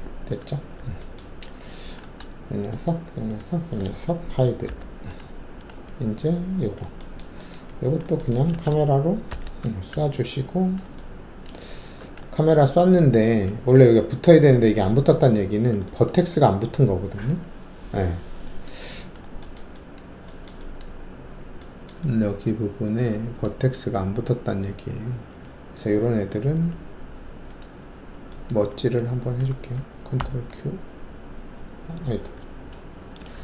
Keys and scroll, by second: 4.6 shift+h, 9.3 ctrl+alt+shift+c, 17.8 alt+w, 25.1 alt+2, 26.4 alt+3, 28.5 alt+1, 30.1 ctrl+q.